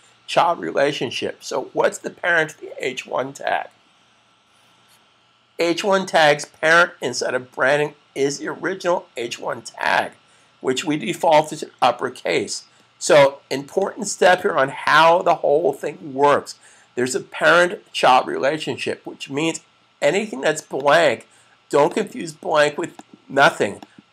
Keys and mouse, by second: 13.4 click, 20.5 click.